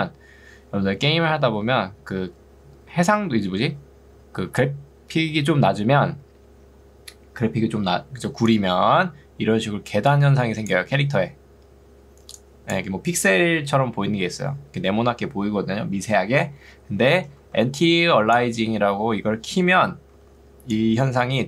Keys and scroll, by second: 16.8 Escape, 17.6 ctrl+2, 19.2 Escape, 20.2 ctrl+2.